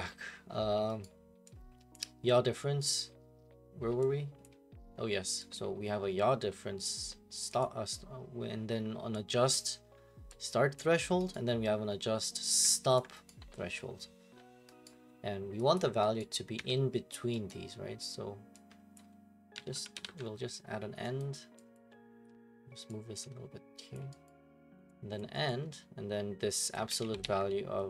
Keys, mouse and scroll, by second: 1.0 right click, 1.9 click, 3.0 right click, 5.1 click, 5.5 click, 9.5 click, 10.8 click, 11.3 right click, 13.0 ctrl+click, 13.3 right click, 14.3 scroll, 14.8 right click, 15.2 scroll, 15.7 click, 16.2 right click, 16.6 Delete, 17.5 right click, 17.9 middle click, 18.9 click, 19.3-20.5 typing, 21.2 right click, 21.7 click, 23.9 click, 24.2 right click, 25.2 click, 25.5 right click, 25.6 scroll, 26.7 click, 27.0 ctrl+c, 27.2 ctrl+v.